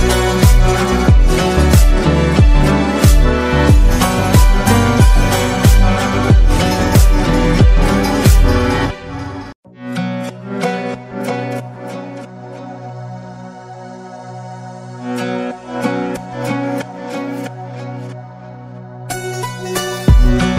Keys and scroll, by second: 6.3 ctrl+-, 6.5 ctrl+-, 9.4 Delete, 18.1-20.5 typing.